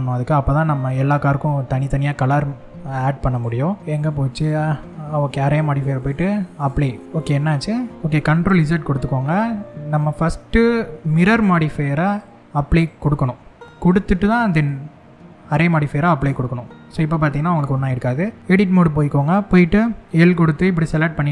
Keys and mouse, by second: 3.9 click, 5.8 click, 8.2 ctrl+z, 11.7-12.8 drag, 14.1-16.1 drag, 17.9 Tab, 19.6 l.